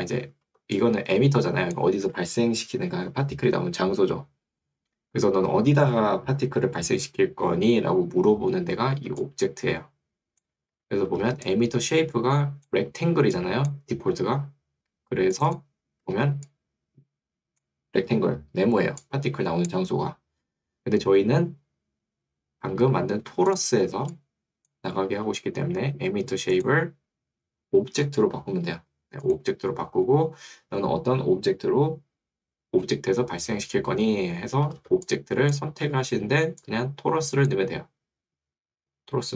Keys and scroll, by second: 2.1 Escape, 10.7 Escape, 14.1 Escape, 20.5 Escape, 24.1 2, 25.3 2, 26.7 2, 29.3 2, 35.9 Escape.